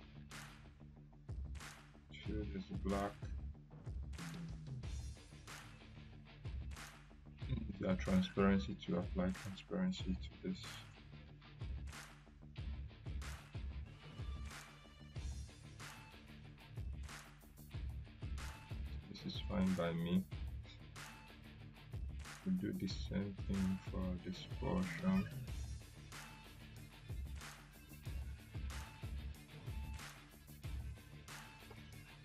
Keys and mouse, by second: 7.4-9.5 drag, 16.1 ctrl+z, 17.0-17.6 drag, 23.4-25.2 drag.